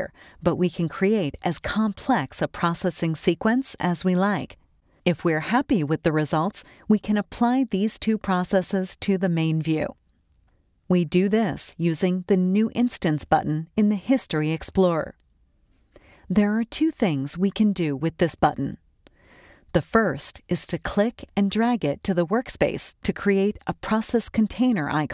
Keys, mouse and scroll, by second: 1.1 click, 19.9 click, 24.8 click.